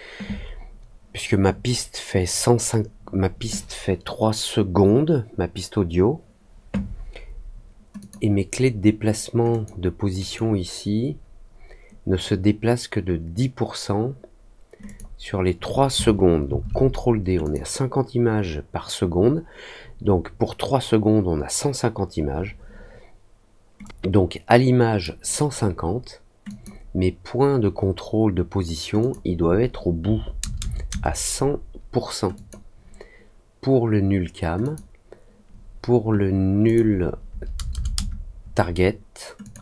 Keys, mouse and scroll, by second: 7.9 click, 9.4 click, 10.1 right click, 14.8 click, 17.4 click, 23.8-25.0 drag, 26.4 click, 28.9 click, 32.3 click, 34.6 click, 36.6 click, 39.4 click.